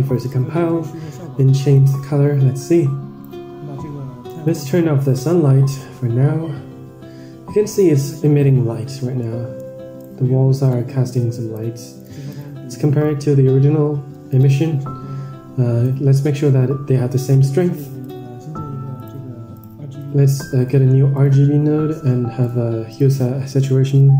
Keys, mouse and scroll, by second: 4.8 click, 6.2-6.8 scroll down 3, 6.7 scroll up 2, 9.2 middle click, 9.9 drag, 10.6-11.4 drag, 12.5 ctrl+shift+click, 14.6 ctrl+shift+click, 16.5 middle click, 17.2 shift+a, 19.9-20.2 drag, 23.7-24.1 drag.